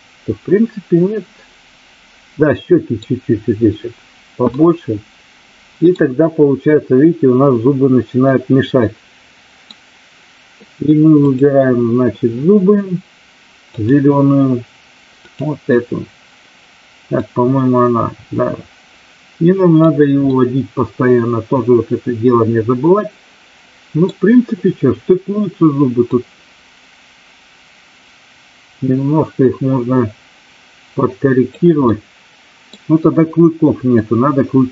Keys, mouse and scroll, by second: 4.5-5.8 middle drag, 8.1-9.7 middle drag, 9.7 scroll down 1, 11.1 click, 13.7 click, 15.1 click, 17.1-19.8 drag, 20.3 scroll up 2, 20.4-24.0 middle drag, 26.0-31.5 drag, 31.8-32.8 middle drag, 33.9 scroll up 2, 34.0-34.7 middle drag.